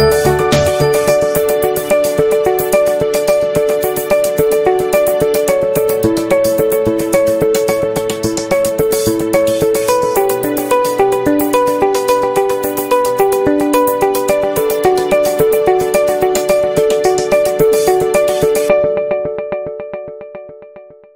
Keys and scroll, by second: 3.4 v, 6.1 i, 6.8 ctrl+z, 7.3 v, 8.3 i, 10.0 p, 16.7 v, 20.1 a.